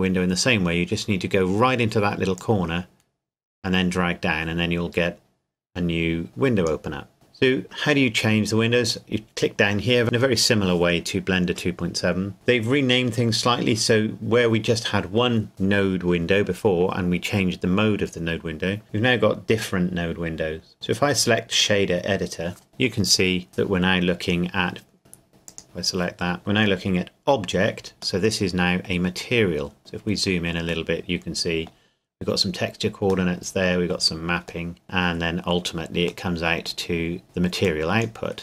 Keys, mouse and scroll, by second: 2.3 click, 8.9 click, 21.5 click, 25.5 click, 28.2 middle click, 28.5 middle click, 29.5 scroll up 1, 30.9 middle click, 32.3-33.3 scroll down 1, 33.3 middle click, 37.6 click, 38.3-38.4 scroll up 1.